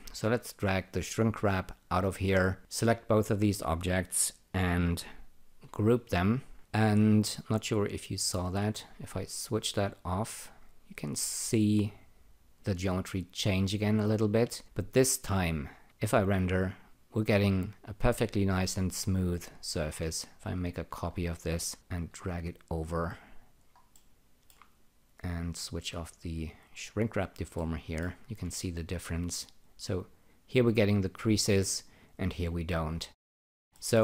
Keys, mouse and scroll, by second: 0.0-1.5 drag, 2.5 click, 3.1 ctrl+click, 5.6 alt+g, 6.6 click, 7.8 click, 9.5 click, 13.4 click, 15.8 r, 19.6 click, 20.3 ctrl+click, 21.1-21.8 scroll down 1, 21.8 click, 23.9 alt+middle click, 25.6 click, 26.9 click, 27.5 alt+middle click, 28.4 ctrl+r, 33.1-33.5 scroll down 2, 33.7 alt+middle click.